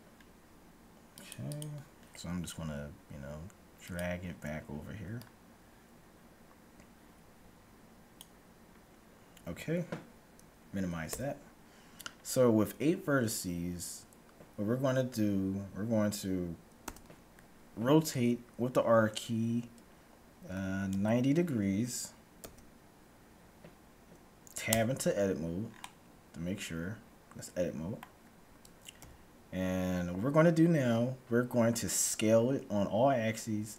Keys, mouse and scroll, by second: 1.3-3.2 drag, 11.0 n, 12.2-14.0 middle drag, 16.8 r, 24.8 Tab, 25.8-27.8 middle drag, 29.0 KP_1, 31.8-33.7 middle drag.